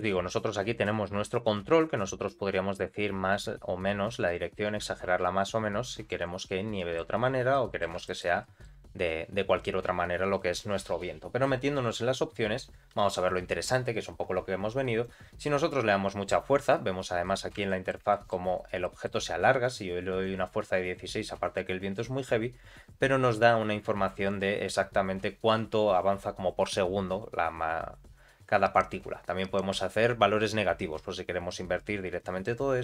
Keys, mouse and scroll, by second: 0.2 middle click, 1.2 r, 1.9 scroll down 2, 2.8 scroll down 1, 6.7 middle click, 7.2 scroll up 1, 7.5 middle click, 8.0 shift+middle click, 8.4 middle click, 11.7 click, 15.0-16.7 drag, 16.9 scroll down 2, 17.2 middle click, 17.6 shift+middle click, 18.1 middle click, 18.5-18.8 scroll down 1, 18.8 middle click, 20.2-32.8 drag.